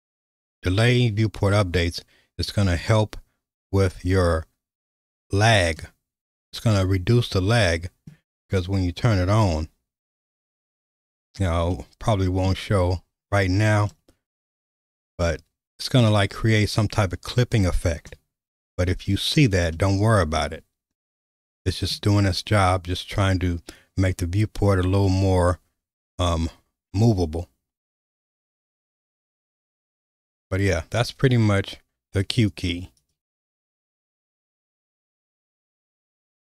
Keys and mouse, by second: 7.2-8.2 middle drag, 9.2 q, 11.9 middle click, 14.0-15.0 middle drag, 15.4 shift+middle click, 19.7-22.0 middle drag, 25.1-29.6 middle drag, 32.3-36.5 drag.